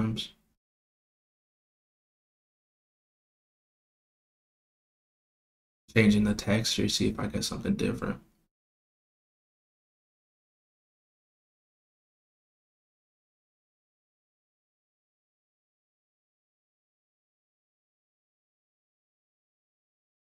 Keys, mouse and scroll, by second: 1.4 click, 1.8 click, 2.9 click, 4.0 click, 5.6-7.0 drag, 8.4 click, 9.8 click, 11.2 click, 12.7 click, 13.5 click, 15.4 click, 15.7 click, 16.5-17.7 drag, 19.9 click.